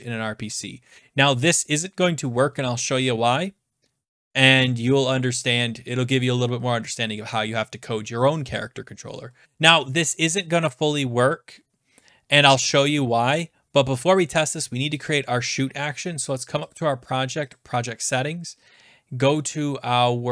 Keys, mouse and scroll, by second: 0.4 ctrl+s, 1.2 scroll, 9.4 click, 11.6 scroll down 2, 15.0 click, 15.1 click, 16.7 click, 17.8 click.